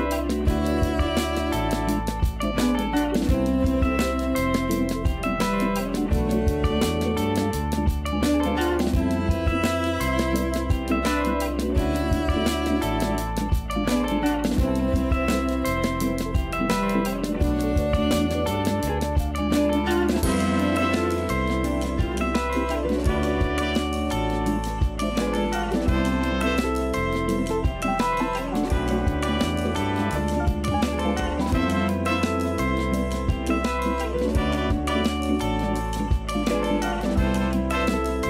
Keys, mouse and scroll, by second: 1.1 click, 2.9-4.2 drag, 4.7 x, 5.3 scroll up 1, 5.8 scroll down 4, 7.2-9.1 shift+middle drag, 9.1 shift+a, 14.7 ctrl+alt+KP_0, 16.8 a, 17.0 click, 18.6 r, 20.3 g, 22.1 s, 23.9 g, 25.3 g, 26.7 s, 27.9 g, 28.7 a, 28.9 a, 29.2 z, 29.8 Tab, 30.3 a, 30.6 a, 30.8-31.5 scroll up 1, 31.5-32.1 shift+middle drag, 32.1-32.5 scroll up 5, 33.2 click, 34.1 scroll down 3, 35.1 click, 35.5 Tab, 35.9 a, 36.7 alt+s.